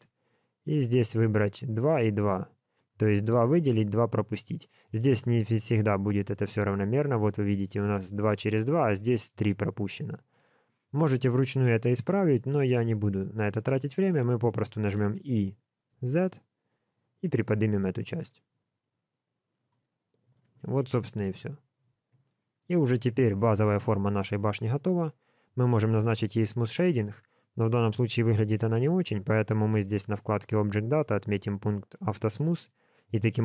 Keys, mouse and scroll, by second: 1.2 click, 1.7 click, 5.5 middle click, 8.6 middle click, 12.2 middle click, 14.9 e, 20.5 alt+a, 21.2 Tab, 21.5 scroll down 2, 22.2 middle click, 23.2-23.6 scroll down 3, 23.8 shift+middle click, 25.6 right click, 27.2 scroll up 2, 30.1 click, 31.0 click, 32.0 click.